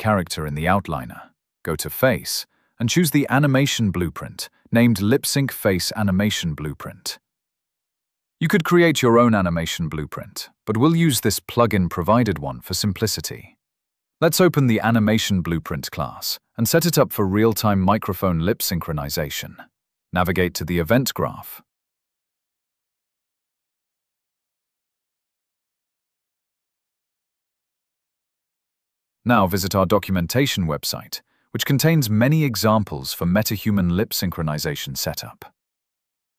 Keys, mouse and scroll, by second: 1.0 click, 5.0-6.5 typing, 7.5 click, 14.5 click, 19.0 right click, 20.9 click, 21.5 right click, 22.8 click, 23.5 Delete, 24.1 right click, 24.5 click, 25.7 click, 29.0 click, 29.0 scroll, 35.3 scroll.